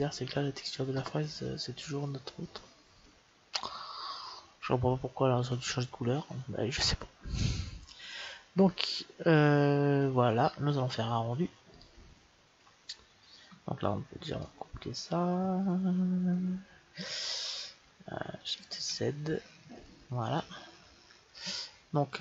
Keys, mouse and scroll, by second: 11.7-15.6 drag, 19.0 shift+z.